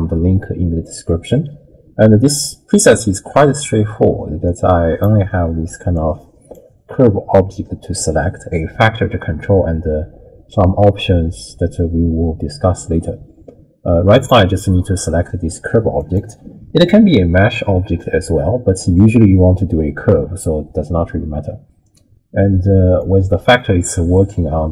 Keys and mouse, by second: 4.4 click, 5.9 click, 14.2 click, 23.0-24.7 drag.